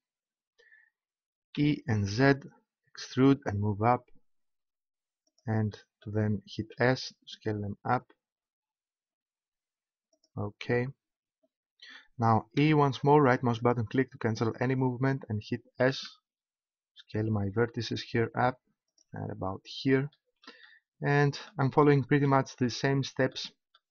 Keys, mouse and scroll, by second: 1.5 e, 5.4-8.0 drag, 6.7 s, 10.2-12.0 drag, 12.5 e, 13.7-15.4 right drag, 15.8 s, 19.0-20.6 drag.